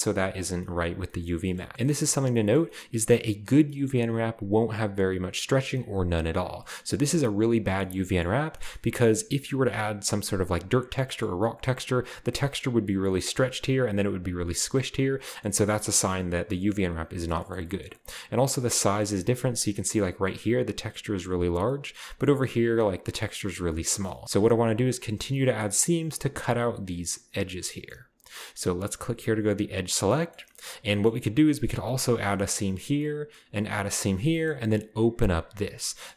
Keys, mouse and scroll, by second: 1.6 shift+middle click, 1.6 shift+scroll down 1, 1.7-3.7 shift+scroll up 3, 6.4-6.8 scroll down 1, 6.8-7.7 scroll up 1, 7.8-9.2 shift+middle drag, 8.8-10.9 scroll up 3, 10.9-12.1 scroll down 3, 13.3 shift+middle click, 14.5-15.0 scroll down 2, 18.4-20.1 scroll up 3, 19.6 right click, 19.7 middle click, 19.7 right click, 20.5-21.5 scroll up 1, 21.5-22.2 scroll down 2, 22.2-23.1 scroll down 1, 23.1-23.6 scroll up 2, 23.6 scroll down 2, 23.7-26.0 middle drag, 24.0 scroll up 2, 29.8 click, 30.1-30.9 middle drag, 35.8-36.1 scroll down 2.